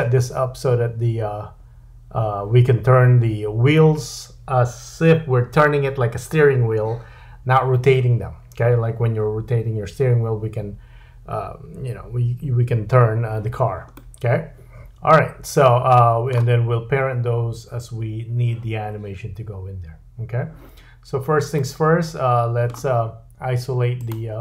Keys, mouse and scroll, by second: 13.9 middle click, 21.5 middle click, 24.0 click.